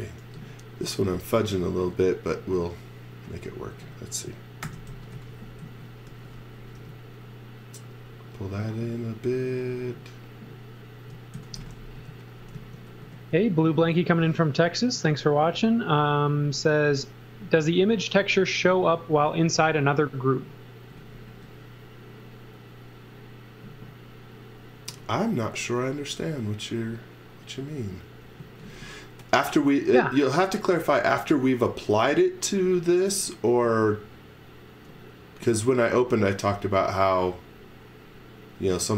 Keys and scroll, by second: 0.2 m, 1.3 space, 4.4-6.8 typing, 11.1-13.0 typing, 20.9 x, 21.3 v, 28.4 z, 35.5 z.